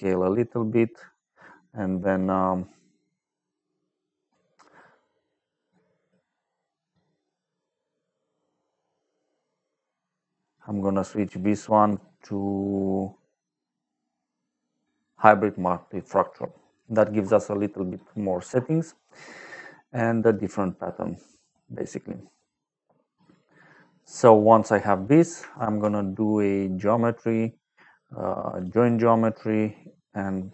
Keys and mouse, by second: 4.3 middle click, 10.2 click, 15.0 click, 15.8 middle click, 20.3 middle click, 24.2 middle click, 24.7 middle click, 25.0 middle click, 25.5 shift+a, 28.5 click, 29.2 click, 30.1 click.